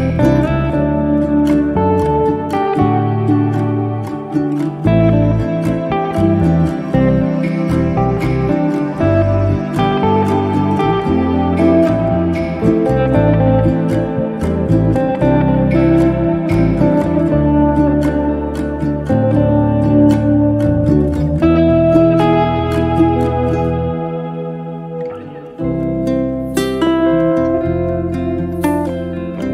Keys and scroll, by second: 22.7 b.